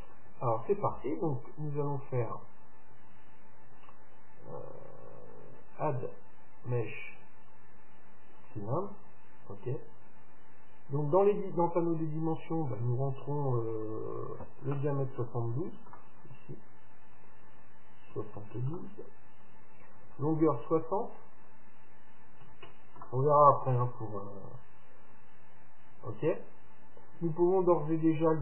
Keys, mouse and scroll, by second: 0.4-2.4 middle drag, 11.7-13.6 drag, 17.2-19.1 drag, 21.4-23.4 drag, 24.7-25.6 scroll down 1, 25.6-26.9 middle drag, 26.9-27.5 scroll up 1, 27.7-28.4 scroll down 1.